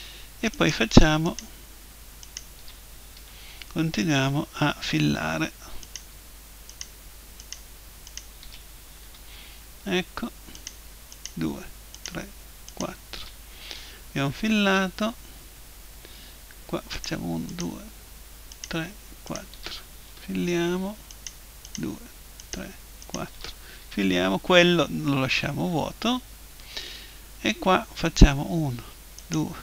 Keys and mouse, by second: 3.2 f, 3.9 middle click, 4.0 right click, 5.8-9.8 right drag, 9.0 f, 9.8 middle click, 10.6-14.4 right drag, 13.8 f, 14.4 middle click, 17.0-20.8 right drag, 20.1 f, 20.8 middle click, 21.1-24.7 right drag, 23.8 f, 24.7-27.0 middle drag, 28.0-29.6 right drag.